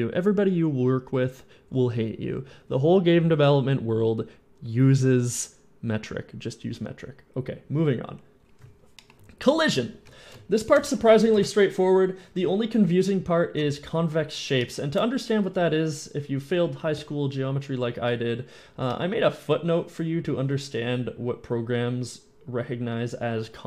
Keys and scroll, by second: 11.5 shift+End.